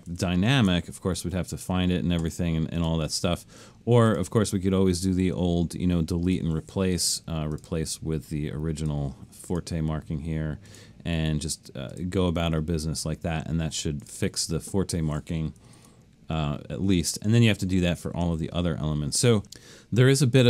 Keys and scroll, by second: 0.1 alt+shift+super+s, 15.8 super+d.